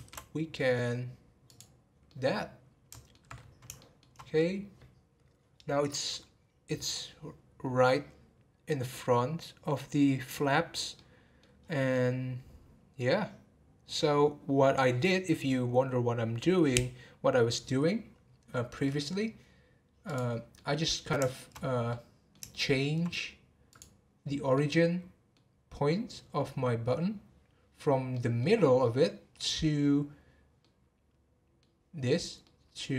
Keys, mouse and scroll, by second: 2.0-3.3 middle drag, 3.3-3.8 scroll up 2, 3.8-4.2 shift+middle drag, 4.2-4.8 scroll up 7, 5.4 scroll down 2, 9.5-10.3 scroll down 2, 10.9-11.6 middle drag, 11.6 scroll down 1, 11.9-14.9 middle drag, 18.9-20.1 middle drag, 20.1 click, 20.5-21.5 middle drag, 21.5-21.9 scroll up 1, 21.9-23.7 middle drag, 23.7 click, 24.5-25.6 middle drag, 25.6-26.4 scroll down 2, 28.1-32.9 middle drag.